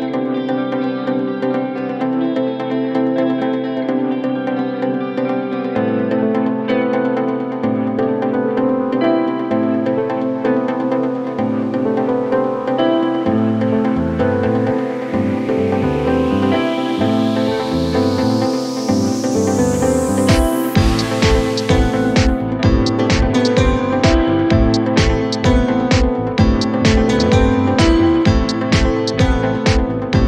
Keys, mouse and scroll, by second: 3.9 shift+a, 5.0 r, 7.4-7.7 scroll down 2, 7.7 middle click, 8.6 r, 11.3 KP_1, 11.8-12.9 scroll up 1, 12.9 s, 18.0-18.4 shift+middle drag, 18.4 scroll up 2, 18.8 s, 20.5-20.9 shift+middle drag, 20.9 scroll up 2, 21.6 g.